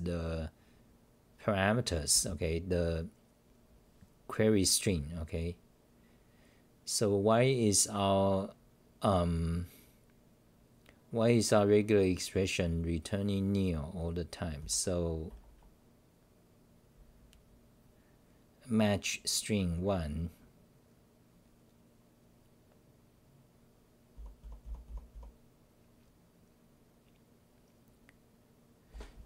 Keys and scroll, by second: 2.1 h, 14.6 t, 15.3 r, 24.1-25.1 typing, 28.9-29.2 typing.